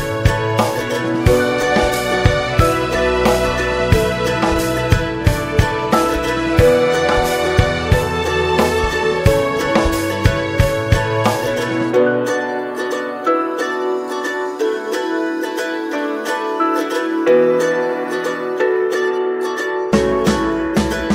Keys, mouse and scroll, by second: 11.5-16.2 drag, 18.7 ctrl+z.